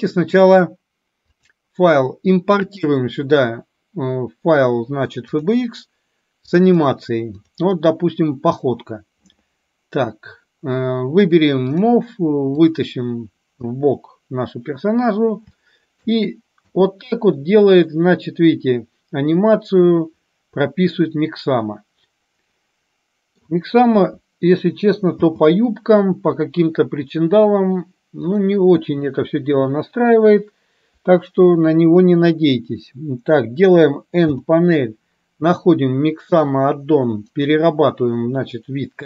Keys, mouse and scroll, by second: 1.4-5.8 drag, 11.8 drag, 12.8-13.9 drag, 15.8-16.1 shift+middle drag, 16.9 space, 18.1-23.6 middle drag, 24.3 KP_1, 25.3 space, 34.3 n, 37.4-39.0 drag.